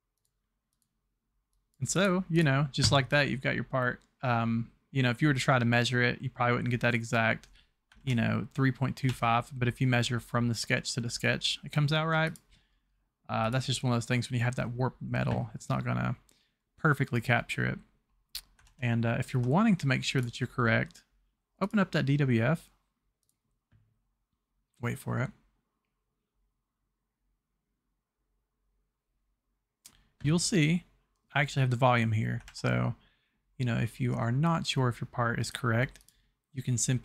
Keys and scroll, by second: 8.1 alt+Tab, 9.1 Tab, 18.7 alt+Tab, 32.4 alt+Tab.